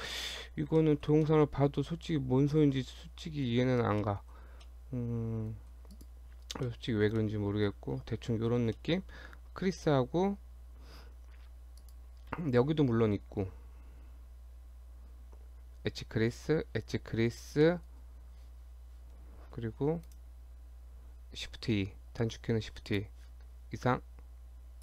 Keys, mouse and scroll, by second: 0.0 shift+scroll up 1, 0.8 shift+middle click, 1.3 middle click, 2.1 middle click, 2.7-3.2 scroll up 2, 3.2 middle click, 3.7 Tab, 4.0 middle click, 4.4 Tab, 4.7 middle click, 5.9 click, 6.3 scroll down 2, 6.7 shift+middle click, 6.9 shift+scroll down 2, 7.2 middle click, 8.0 shift+scroll down 2, 8.3 shift+middle click, 8.8 middle click, 11.8 click, 17.6 middle click, 20.1 right click, 22.9 click.